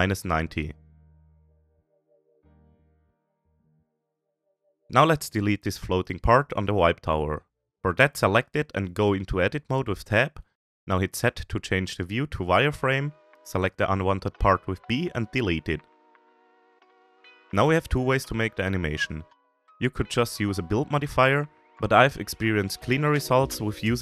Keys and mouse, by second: 1.9-2.3 shift+middle drag, 2.6-3.0 middle drag, 3.2-3.8 shift+middle drag, 4.0-4.9 middle drag, 4.9-8.0 middle drag, 8.0 Tab, 8.1 middle click, 10.4 click, 11.6 z, 13.6 b, 16.2 Delete, 20.1 click, 20.5 shift+click, 21.4 z, 23.0 middle click.